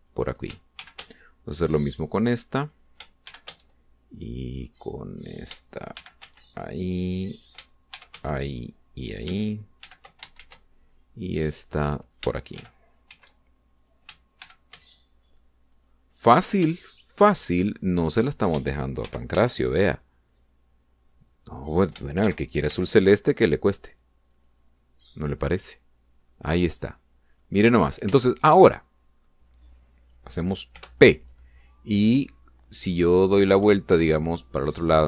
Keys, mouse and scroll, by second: 0.9 click, 1.7 shift+d, 1.9 shift+z, 3.5 click, 4.2 shift+d, 4.4 shift+z, 6.1 click, 6.8 shift+d, 7.2 shift+z, 8.2 click, 8.8 shift+d, 9.1 shift+z, 9.9 click, 10.8 shift+d, 11.3 shift+z, 12.8 click, 13.5 shift+d, 14.0 shift+z, 14.7 click, 15.3 shift+d, 15.7 shift+z, 16.6 click, 17.3 scroll down 2, 17.7 shift+middle click, 20.0 shift+d, 20.3 shift+z, 22.5 click, 23.2 shift+d, 23.6 shift+z, 25.2 click, 25.7 scroll down 2, 26.0-28.5 middle drag, 29.1 shift+middle click, 29.8 middle click, 31.7 p, 33.8 Left, 34.9 Right.